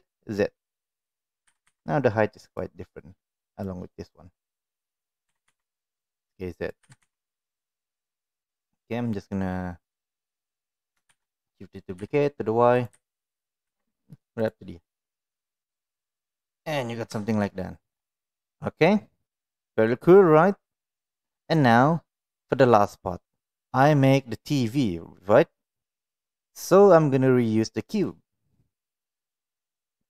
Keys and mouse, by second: 1.4 g, 4.5 click, 5.2 s, 6.8 g, 8.0 click, 8.5-9.1 middle drag, 10.2 click, 11.0 shift+d, 12.9 g, 14.9 click, 15.1-16.5 middle drag, 17.2 shift+middle click, 17.4-19.8 middle drag, 21.5-22.5 middle drag, 27.9 click, 29.0 click, 29.8 click.